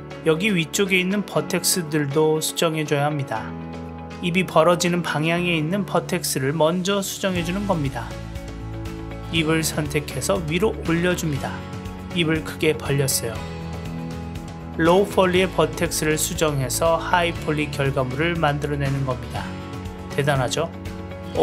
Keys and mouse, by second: 3.4-4.6 drag, 4.8-6.0 middle drag, 6.4 s, 7.7 middle click, 8.9-10.0 drag, 10.2-11.3 middle drag, 11.6-12.6 drag, 12.7 middle click, 13.3 click, 13.4-14.4 middle drag, 15.3 click, 15.5 middle click, 16.2 click, 16.5 middle click, 17.2 click, 19.1 click, 19.4 middle click, 19.8 shift+middle click, 20.3-21.3 drag.